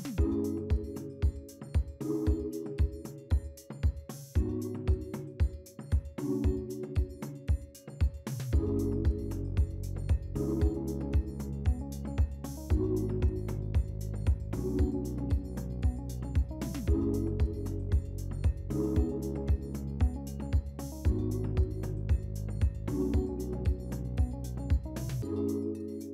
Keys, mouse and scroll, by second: 0.2-0.5 scroll down 1, 0.5-1.3 scroll up 3, 1.3-2.1 scroll down 2, 2.9 scroll up 2, 4.1-5.1 scroll down 3, 5.1-6.0 scroll up 2, 6.1-7.4 scroll down 2, 13.8-26.1 scroll down 1.